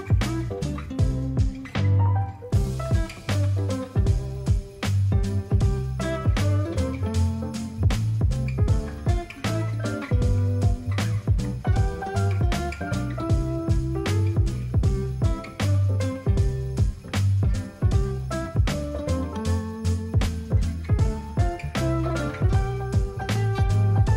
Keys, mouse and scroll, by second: 0.1-3.5 alt+drag, 5.3 click, 11.9 ctrl+a, 14.2 ctrl+d, 16.2 ctrl+0.